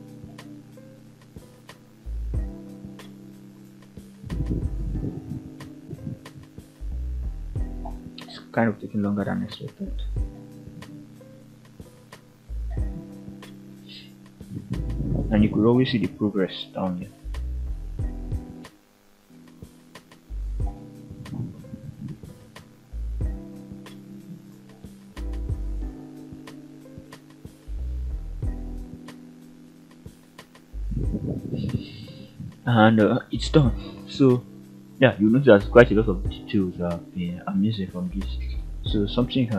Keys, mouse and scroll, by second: 29.7-30.9 scroll down 3, 30.2-30.9 middle drag, 31.1 scroll up 2, 31.4 KP_1, 32.0 scroll up 1, 32.6 alt+a, 32.9 click, 33.3-34.2 middle drag, 35.2 shift+middle click, 37.3 alt+a, 37.9 alt+h, 39.1 click.